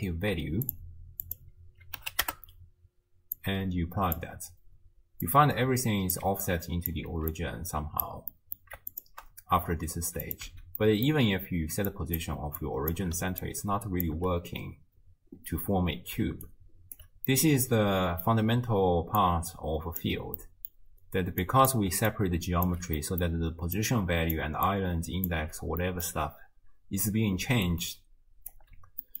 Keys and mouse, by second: 1.3 click, 3.4 click, 3.6-4.2 drag, 5.3 click, 6.5 click, 7.1 ctrl+x, 7.5 click, 8.4 click, 8.9 ctrl+shift+right click, 10.5 x, 10.8 click, 12.0 right click, 12.7 right click, 13.2 d, 13.4 click, 14.1 d, 14.2 d, 16.2 d, 16.5 click, 17.0 d, 17.3-18.4 middle drag, 19.2 click, 20.4 middle click, 21.5 click, 21.9-25.4 typing, 22.1 click, 23.1 middle click, 23.8 click, 24.7 click, 25.8 middle click, 27.4 d, 27.7 click, 28.5-29.2 typing.